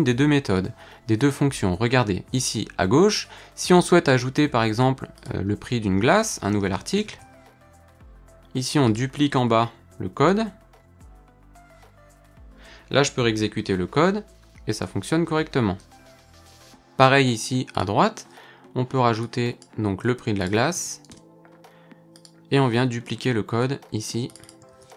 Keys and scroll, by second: 23.1 alt+shift+Down, 24.7 super+c.